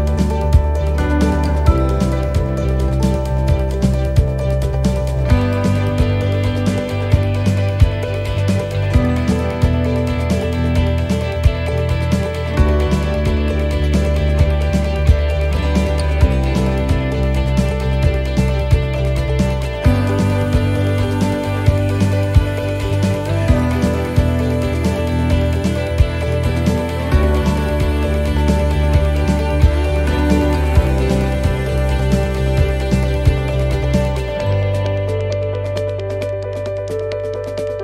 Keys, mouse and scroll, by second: 2.0 click, 4.8 right click, 5.9 click, 8.1 click, 12.8 right click, 13.9 click, 15.9 click, 17.9-18.6 scroll down 4, 18.8 middle click, 19.2-19.7 scroll up 2, 19.7 middle click, 20.5 shift+middle click, 20.9-21.3 scroll up 2, 21.4 shift+middle click, 22.4 shift+middle click, 24.4 scroll down 1, 25.2 right click, 26.0 click, 28.2 click, 30.2 right click, 31.1 click, 33.3 click, 35.5 right click, 36.3 click.